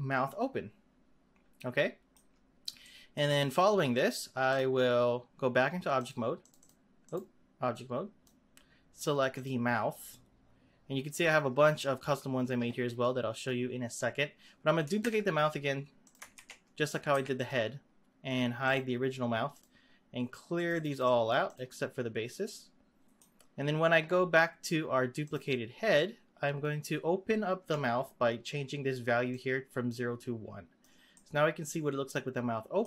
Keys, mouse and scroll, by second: 2.6 scroll down 1, 2.8-4.5 middle drag, 4.5 click, 5.9-6.6 drag, 7.0-9.4 drag, 15.0 shift+d, 16.4 ctrl+z, 17.1 shift+d, 18.6 click, 19.5 click, 20.5-22.4 drag, 22.4-25.2 middle drag, 25.2 click, 29.2-31.1 drag, 31.1-32.8 middle drag.